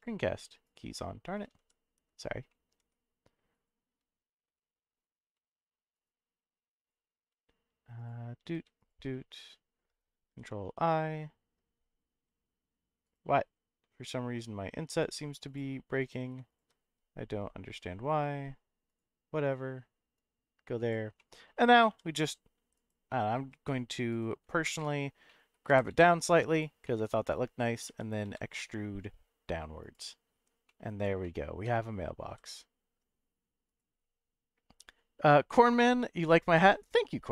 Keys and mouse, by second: 0.0 click, 0.7 click, 1.6 m, 2.5 middle click, 2.8 ,, 5.3 m, 6.8 click, 7.3 n, 8.8 shift+click, 10.3 ctrl+i, 12.2 s, 13.0 right click, 14.9 click, 15.4 click, 16.1 click, 16.5 shift+click, 20.2 click, 21.3 middle click, 21.9 e, 22.7 right click, 23.6 g, 24.1 right click, 24.6 ctrl+z, 25.3 middle click, 25.7 g, 25.9 z, 26.5 click, 26.8 middle click, 27.9 e, 28.2 z, 29.8 click, 30.8 middle click, 31.2 shift+middle click, 32.2 s, 33.6 right click.